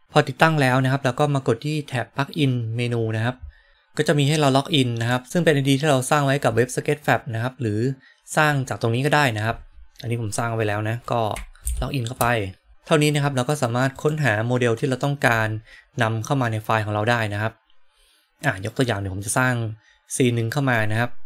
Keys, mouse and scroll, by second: 3.7-12.7 drag, 14.0-21.2 drag.